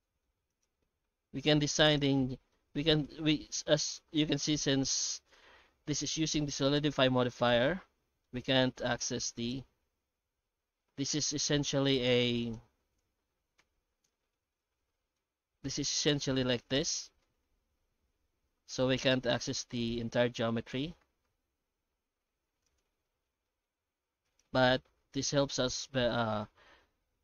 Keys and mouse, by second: 0.0 Tab, 0.0 middle click, 0.5 right click, 1.2 ctrl+shift+b, 2.1 middle click, 2.8-4.0 middle drag, 6.5 middle click, 7.6 shift+middle click, 8.9 right click, 9.4 right click, 10.0 alt+a, 11.7 Tab, 12.2 ctrl+shift+x, 12.6 Tab, 13.1 ctrl+shift+x, 14.6 middle click, 16.1 middle click, 17.2-19.2 middle drag, 20.7 ctrl+shift+x, 23.0 shift+middle click, 24.2 right click, 24.6 alt+middle click, 25.7 shift+middle click.